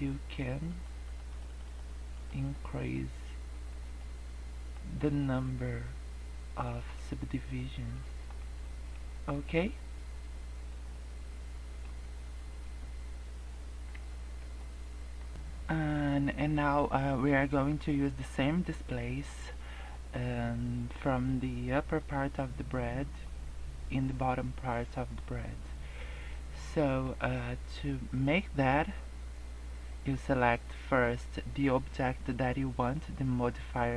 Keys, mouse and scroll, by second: 0.3 click, 0.6 click, 1.0 click, 1.3 click, 1.4 click, 1.7 click, 2.0 click, 2.6 scroll up 2, 2.8 middle click, 3.8 scroll down 2, 3.9 middle click, 4.9 scroll up 2, 5.3 middle click, 6.9 middle click, 7.6 scroll down 3, 7.9 middle click, 8.6 middle click, 9.0 scroll down 2, 9.2 middle click, 9.6 scroll up 1, 10.5 scroll up 1, 10.9 middle click, 12.0 scroll down 1, 13.8 Tab, 14.5 middle click, 15.3 scroll down 1, 26.5 middle click.